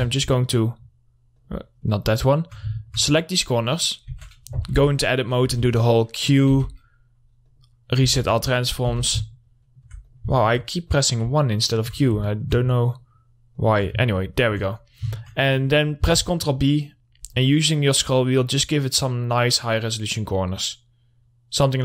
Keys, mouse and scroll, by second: 0.2 ctrl+click, 0.5-1.8 alt+middle drag, 1.8 alt+click, 2.3 alt+middle click, 3.8-4.2 scroll up 1, 4.2 middle click, 4.6 Tab, 5.2 1, 6.0 1, 6.9 q, 7.7 click, 8.5 Tab, 8.8 middle click, 9.0-9.4 scroll down 1, 9.4 2, 9.6 middle click, 10.5 click, 10.8 alt+middle click, 11.3 click, 12.5 scroll down 1, 12.7 alt+middle click, 13.4 ctrl+click, 14.5 alt+middle click, 15.2-15.5 scroll up 1, 15.6 alt+middle click, 16.5 ctrl+b, 17.1 scroll up 2, 18.7 scroll down 1, 20.5-21.0 scroll up 1, 21.0-21.8 scroll down 1.